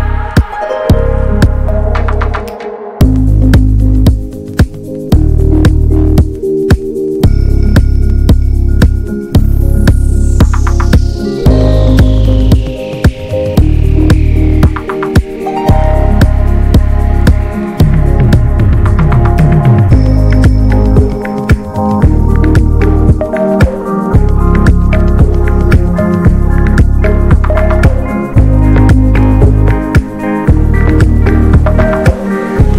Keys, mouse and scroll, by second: 0.7 scroll up 2, 0.9 click, 1.2-1.5 scroll down 4, 1.5-2.7 drag, 2.7 shift+d, 3.8 ctrl+shift+right click, 4.5-6.6 drag, 6.6-7.0 scroll up 1, 7.0 middle click, 7.0 ctrl+shift+right click, 7.7 middle click, 8.2-9.3 drag, 9.3 ctrl+s, 9.7 click, 10.1 middle click, 10.5 click, 11.0-12.0 middle drag, 11.0-12.0 scroll up 4, 12.0-13.9 drag, 13.9 scroll up 1, 14.1-19.3 drag, 20.1-21.3 ctrl+shift+drag, 21.6-23.0 drag, 24.1 middle click, 24.8 scroll down 2, 25.1 ctrl+shift+click, 25.7 middle click, 25.9 ctrl+shift+click, 26.6 ctrl+s, 27.3-28.0 scroll up 2, 28.0 click, 28.9 middle click, 29.7-30.1 scroll down 2, 30.1-31.4 drag, 31.4-32.3 scroll down 4, 32.3 click, 32.6-32.7 scroll down 1.